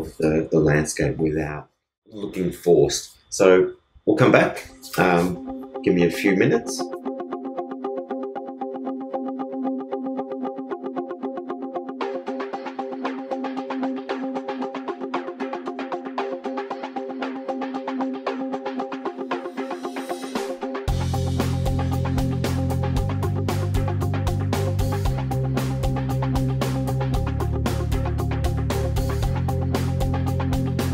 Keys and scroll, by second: 11.2 super+Return, 11.6 super+e, 11.7 super+z, 21.3 super+BackSpace, 21.7 super+d, 22.4 super+BackSpace, 22.6 super+d.